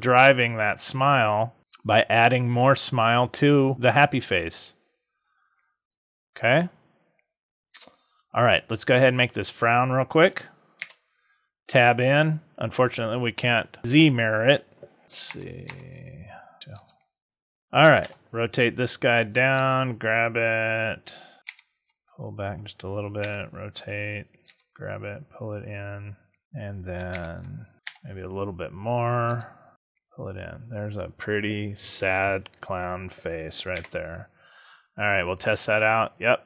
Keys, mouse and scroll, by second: 5.5 click, 7.1 click, 10.7 Tab, 15.2 ctrl+shift+KP_Add, 16.5 b, 16.7 b, 17.9 r, 19.3 click, 19.5 g, 21.1 click, 21.4 ctrl+KP_Subtract, 23.1 r, 24.3 click, 24.4 g, 26.4 click, 27.1 ctrl+KP_Subtract, 27.8 r, 29.2 click, 29.2 g, 30.0 click, 33.6 Tab, 35.1 click.